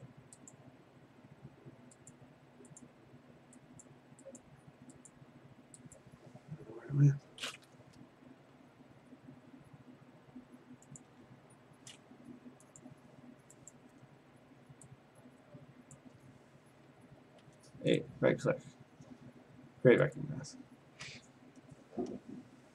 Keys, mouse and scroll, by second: 0.0 click, 0.8 click, 2.1 click, 2.8 click, 3.8 click, 4.4 click, 5.8 click, 6.9 click, 11.0 click, 12.8 click, 13.7 click, 15.9 click, 17.4 a, 18.0 right click, 20.3 click, 21.0 ctrl+z.